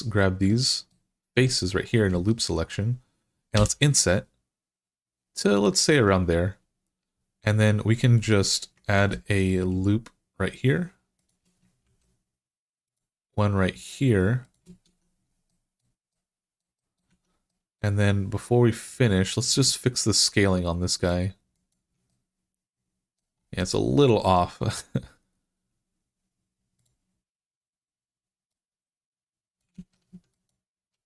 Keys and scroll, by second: 3.4 i, 8.8 ctrl+r, 11.7 ctrl+r, 14.7 Tab, 16.9 Tab, 29.6 ctrl+z.